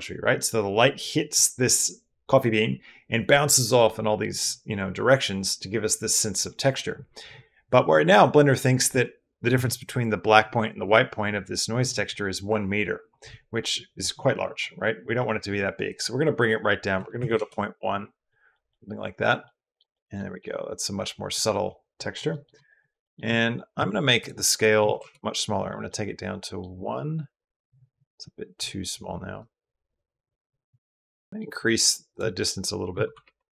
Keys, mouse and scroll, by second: 13.5 click, 15.8-17.2 middle drag, 18.1 middle click, 18.5 middle click, 19.3 middle click, 19.7 middle click, 20.2 middle click, 21.8 middle click, 22.1 middle click, 22.6 middle click, 22.8 middle click, 24.0 click, 25.7 click, 29.2-31.3 drag, 31.9-33.0 drag.